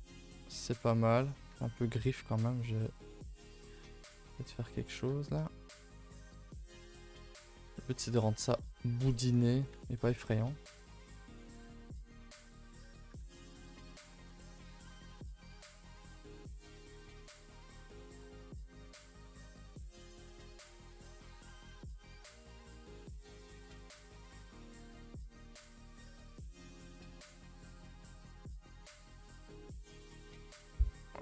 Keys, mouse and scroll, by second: 1.2 click, 1.5 Tab, 1.6-2.0 scroll up 4, 2.0 middle click, 2.3 scroll up 2, 2.4 middle click, 3.3 alt+click, 3.6 middle click, 4.3 1, 4.9 click, 5.2 shift+click, 5.4 middle click, 5.8 g, 6.5 middle click, 6.7 g, 7.1 middle click, 7.4 scroll down 1, 7.7 shift+middle click, 8.2-8.6 scroll down 3, 8.6 middle click, 9.4 Tab, 9.7 Tab, 10.0 3, 10.5 click, 11.3 alt+click, 12.2 click, 12.7-13.1 scroll up 1, 13.1 g, 14.3 middle click, 15.1-15.4 scroll up 2, 15.4 middle click, 15.7 r, 16.6 g, 17.2 r, 18.5-19.2 drag, 19.4 Tab, 19.6 scroll down 2, 19.7 a, 19.9 a, 19.9-20.4 middle drag, 20.4 ctrl+s, 20.6 scroll down 4, 20.8-21.6 middle drag, 21.6 scroll up 2, 21.8 middle drag, 22.1 scroll down 4, 22.3-24.5 middle drag, 24.5 click, 24.7 Tab, 24.8-25.1 scroll up 5, 25.1 2, 25.3 2, 25.5 shift+middle click, 25.9 scroll up 2, 26.1 a, 26.2 a, 26.3-27.6 middle drag, 27.6 scroll down 2, 27.8-29.3 middle drag, 29.3 scroll up 1, 29.5 middle click, 30.0 3, 30.2-31.2 middle drag.